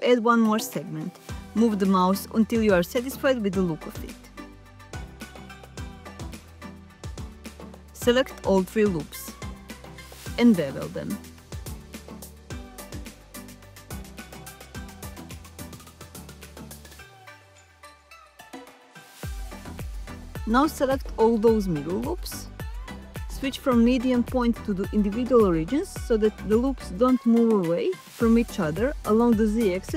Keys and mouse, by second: 6.9 click, 7.5 alt+click, 9.3 alt+shift+click, 10.4 ctrl+b, 20.2 alt+click, 25.2-26.3 drag.